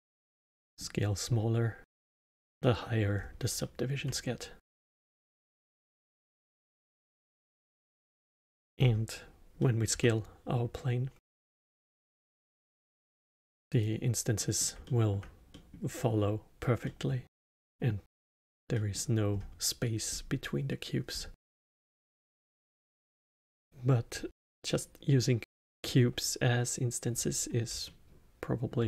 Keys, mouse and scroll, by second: 1.2 scroll up 1, 1.8-3.1 alt+middle drag, 3.1 scroll down 2, 3.5-5.1 alt+middle drag, 5.1 click, 5.5-7.3 drag, 7.3 scroll down 2, 7.9-8.2 middle drag, 8.2 click, 8.7-9.5 scroll down 1, 9.5-9.9 middle drag, 9.9 s, 14.3-19.2 middle drag, 19.2 scroll up 2, 20.0 scroll up 3, 21.0 scroll down 3, 21.7-23.5 alt+middle drag, 23.5 scroll down 1, 24.7-27.7 middle drag, 27.8-28.8 alt+middle drag.